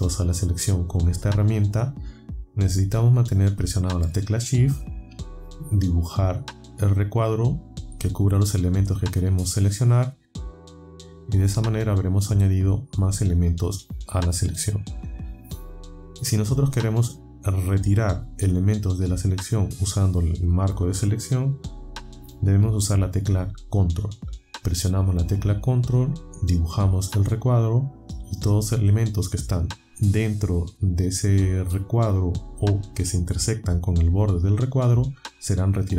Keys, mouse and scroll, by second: 6.5-11.1 shift+drag, 26.4-28.3 ctrl+drag.